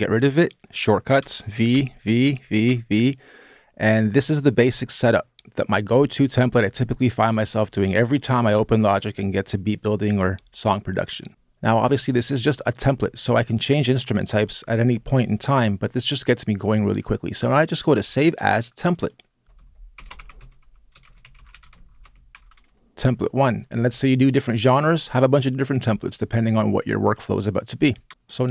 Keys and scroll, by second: 1.0 v, 1.5 v, 2.0 v, 2.4 v, 19.7-21.6 typing, 27.9 Return.